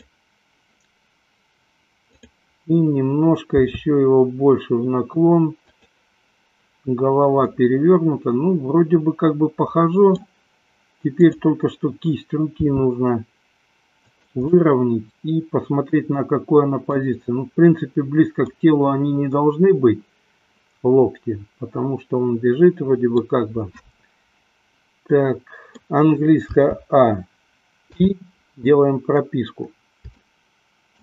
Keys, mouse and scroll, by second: 2.1 click, 3.8 r, 6.1 click, 7.7-10.6 middle drag, 11.5 click, 12.8 r, 14.7-17.2 middle drag, 19.0-23.2 middle drag, 25.2 middle click, 26.8 a, 28.1 i, 30.5 shift+middle click.